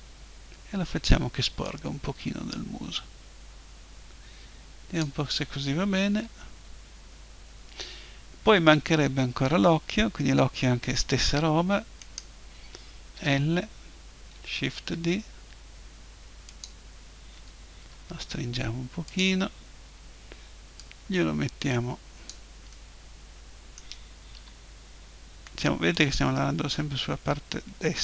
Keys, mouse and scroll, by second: 2.2-3.6 drag, 6.0 KP_1, 12.0-13.8 right drag, 13.2 l, 13.8 middle click, 14.7 shift+d, 16.6-18.6 drag, 17.8 s, 19.2-22.7 drag, 22.7-24.4 middle drag, 24.4 KP_7, 26.0-27.5 drag.